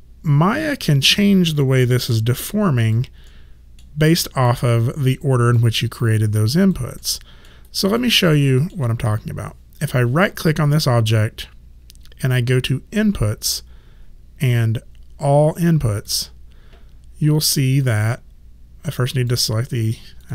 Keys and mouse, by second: 2.2 alt+click, 3.3 alt+middle click, 4.1 alt+right click, 4.7 alt+click, 7.0 alt+middle click, 7.7 alt+right click, 8.2 alt+middle click, 10.3 right click, 17.4 click.